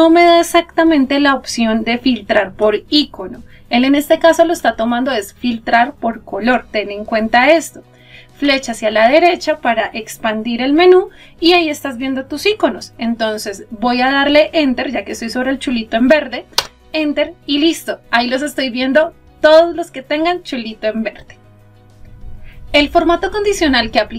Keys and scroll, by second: 13.7 Return.